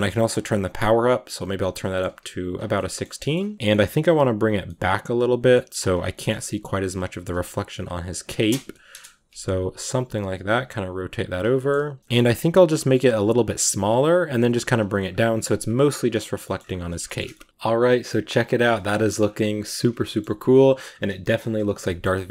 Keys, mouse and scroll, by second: 0.3-1.4 drag, 1.4-3.2 middle drag, 1.9 r, 3.2 g, 3.5 middle click, 3.7 g, 4.5-5.6 middle drag, 5.6 g, 6.0 middle click, 6.3 r, 7.8 g, 8.8 KP_0, 9.6 r, 10.9 r, 11.4 shift+middle click, 11.8 r, 12.1 g, 12.7-14.2 drag, 14.2 g, 14.8 s, 20.0 shift+middle click, 20.4-21.1 scroll down 2, 21.7 shift+middle click, 22.0-22.3 scroll up 1.